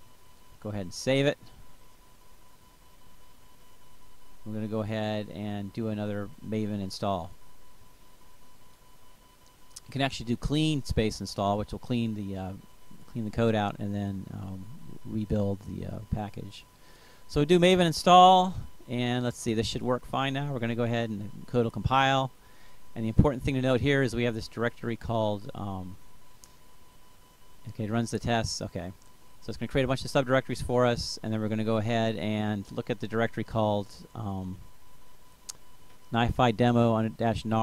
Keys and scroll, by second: 11.0-11.9 typing, 12.9 Up, 14.1 Return.